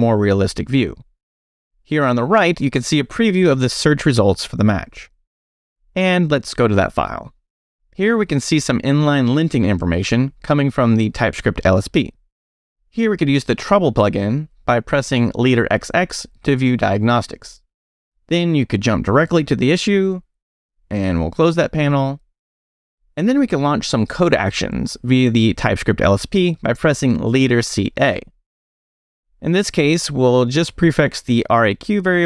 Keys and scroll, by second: 5.0 super+0, 6.0 Return, 13.8 space, 14.4 x, 16.7 x, 18.4 Return, 21.1 space, 21.3 x, 24.1 Escape, 24.5 space, 27.3 c, 29.1 a, 31.5 2.